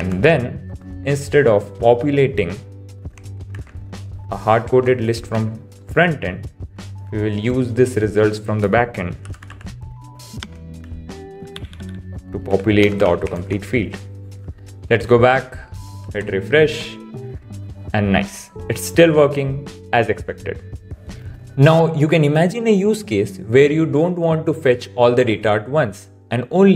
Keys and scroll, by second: 0.9 super+s, 3.5 super+x, 5.2 super+v, 10.8 super+s, 11.6 Up, 12.2 Up, 14.0 super+s, 16.0 super+r.